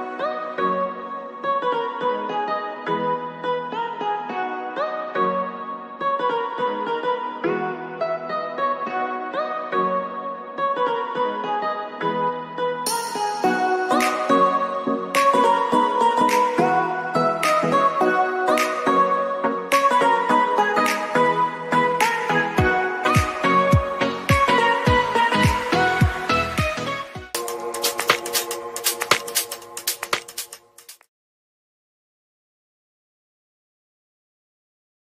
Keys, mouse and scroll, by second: 8.0 ctrl+s, 16.3 click.